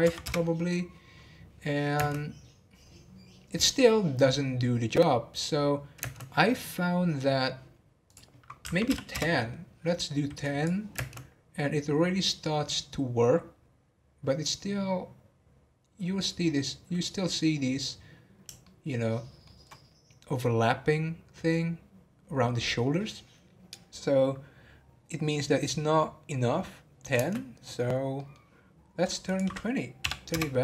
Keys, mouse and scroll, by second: 2.0 space, 6.1 space, 7.4-8.0 scroll up 1, 8.0-10.9 drag, 10.9 space, 15.9-16.3 scroll up 3, 17.9 scroll up 1, 19.2-22.3 shift+middle drag, 27.5 space, 27.9 scroll down 2, 28.1-29.2 middle drag, 29.2-30.6 drag.